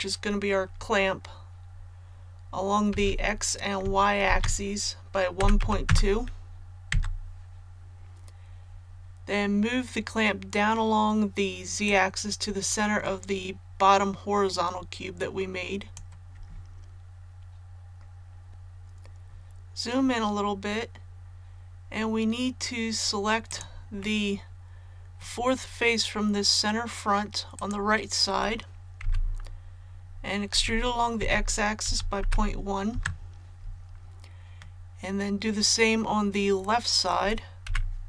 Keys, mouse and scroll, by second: 2.9 s, 4.2 shift+z, 5.3 KP_1, 5.6 KP_Decimal, 5.8 KP_2, 11.8-16.8 drag, 18.5-18.9 scroll up 1, 23.4 right click, 24.0-25.7 middle drag, 27.5 right click, 29.0 KP_1, 30.5-32.2 typing, 34.5-35.7 middle drag, 37.6 KP_1.